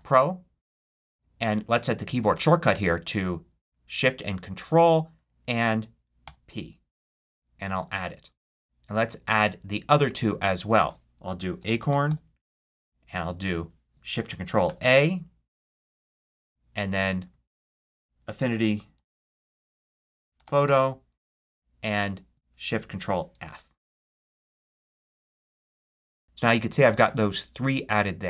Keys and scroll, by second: 0.0-0.8 typing, 6.2 ctrl+shift+p, 11.1-12.5 typing, 14.6 ctrl+shift+a, 18.3-21.0 typing, 23.4 ctrl+shift+f.